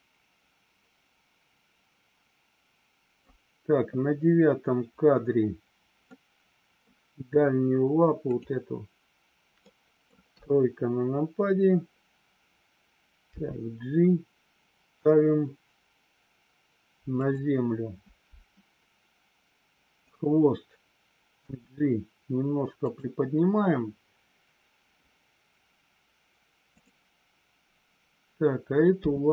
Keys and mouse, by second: 6.0-6.7 middle drag, 8.3-8.7 drag, 9.6-10.1 middle drag, 10.3 KP_3, 17.1 click, 20.0 click, 21.4 g.